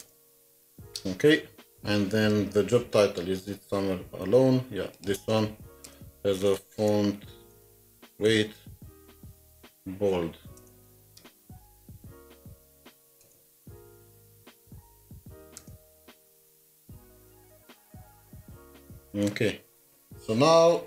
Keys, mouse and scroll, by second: 0.0 Return, 0.0 Up, 2.7 Return, 2.8 scroll up 1, 3.3 scroll up 1, 4.2 scroll down 1, 5.8 Return, 6.3-8.2 typing, 9.9-11.5 typing, 12.6-13.2 typing, 14.6 typing, 15.6 Return, 16.4-19.0 typing.